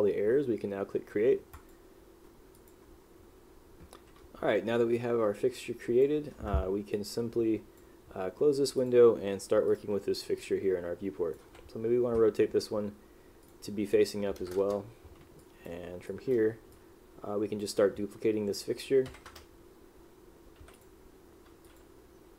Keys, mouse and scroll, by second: 5.1 click, 9.9 Tab, 10.5 click, 14.7 Return, 16.2 click, 16.8 click, 21.8 click.